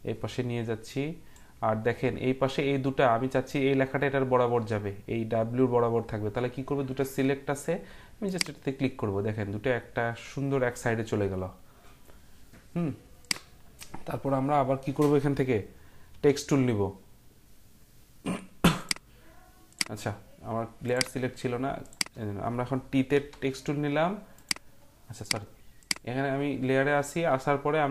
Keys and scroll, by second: 16.2 t, 23.1 t.